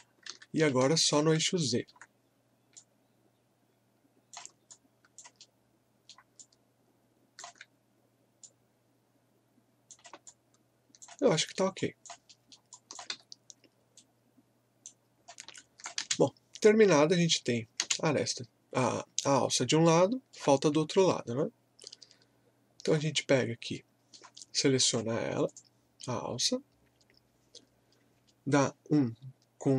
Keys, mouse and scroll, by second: 0.3 ctrl+z, 0.8 alt+click, 1.5 alt+middle click, 2.8-4.7 drag, 4.7 alt+click, 5.4 alt+middle click, 6.4-10.3 alt+drag, 10.3 alt+click, 11.4 alt+middle click, 11.8 alt+click, 12.3 alt+middle click, 12.7 click, 13.1 w, 13.9 right click, 15.2 scroll down 1, 15.6 alt+click, 16.0 space, 16.9-17.3 scroll down 1, 17.8 space, 19.5 scroll up 1, 19.8-23.2 alt+middle drag, 23.2 scroll up 1, 23.7 alt+middle click, 24.8 click.